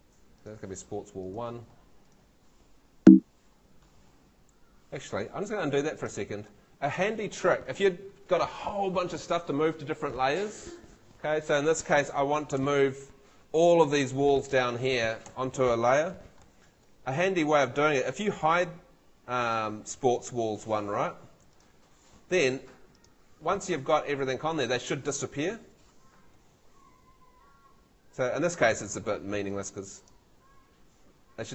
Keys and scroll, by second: 3.0 Home, 5.4 super+z, 12.6 Escape, 15.2 Escape, 15.9 super+Escape, 16.0 super+l.